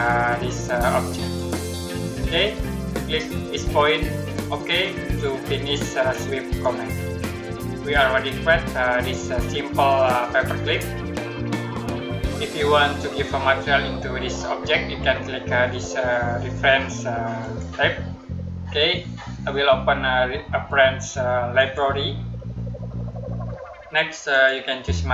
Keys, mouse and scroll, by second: 1.1 click, 5.2 click, 7.2 middle click, 12.9-13.3 scroll down 1, 13.3-15.6 scroll up 1, 17.3 click, 21.4 click, 24.2 click.